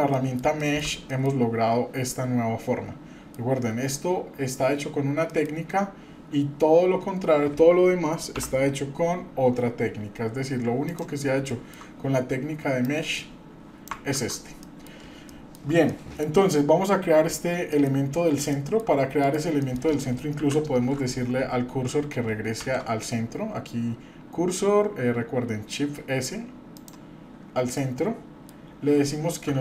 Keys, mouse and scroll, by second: 0.1 middle click, 0.6-0.9 shift+middle drag, 1.1 middle click, 2.1-3.4 middle drag, 5.3 middle click, 8.3 ctrl+i, 10.8 click, 11.5-11.8 shift+middle drag, 12.8-13.9 drag, 14.3 ctrl+z, 14.6 middle drag, 15.3-15.6 shift+middle drag, 15.9 middle drag, 17.7 middle click, 18.0-18.4 scroll up 1, 18.5 shift+middle click, 19.2 middle click, 19.3 scroll down 1, 19.6 middle click, 20.3 KP_7, 20.8-21.3 scroll up 3, 22.6 shift+s, 27.8-28.5 middle drag, 28.7-29.2 scroll up 1, 29.5 shift+a.